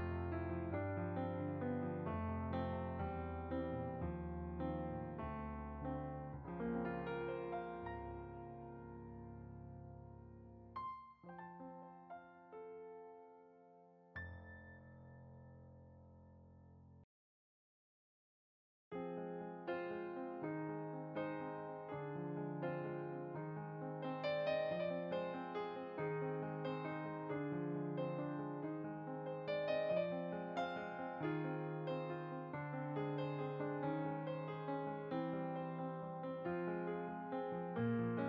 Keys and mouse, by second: 3.5 f, 3.6 click, 7.0 click, 8.2 click, 14.4 shift+a, 16.6 click, 18.8 right click, 20.8-22.0 typing, 21.9 click, 22.6 right click, 23.3 click, 23.9 right click, 25.1 click, 25.8 s, 26.8 click, 29.3 s, 29.6 z, 30.0 click, 30.8 z, 32.1 click, 32.9 s, 33.1 z, 33.9 click, 35.4 g, 35.7 z, 36.4 click.